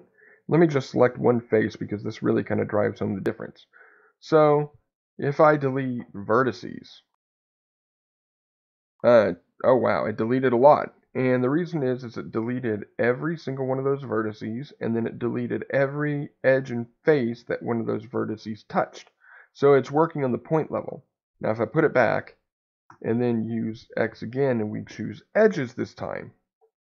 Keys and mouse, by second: 1.7 middle click, 20.8 ctrl+z, 22.8 x.